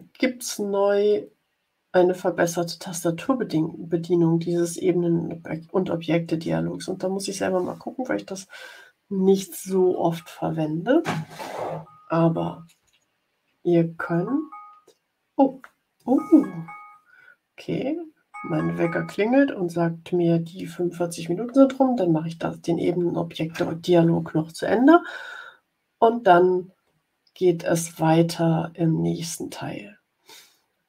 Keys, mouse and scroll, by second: 12.7 Tab, 13.8 Tab.